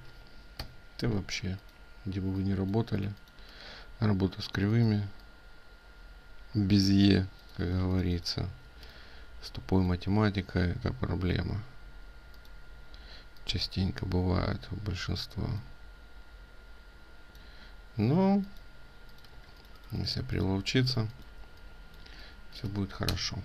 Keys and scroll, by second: 1.2 ctrl+space.